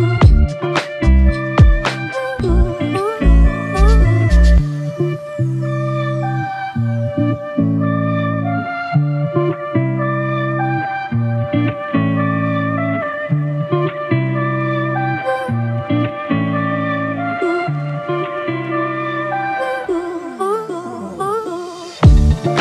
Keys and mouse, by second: 22.1 ctrl+i.